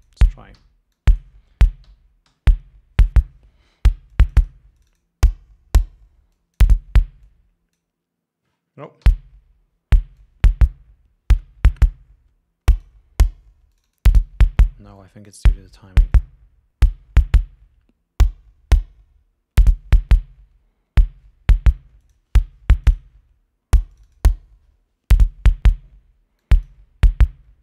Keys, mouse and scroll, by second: 0.8 g, 1.2 click, 2.5 l, 4.4 click, 5.0 click, 6.6 click, 7.5-8.2 drag, 9.3 l, 10.4-13.3 drag, 14.0 click, 15.2 click, 16.4-20.4 drag, 22.3 click, 23.1-24.6 drag, 26.7 click.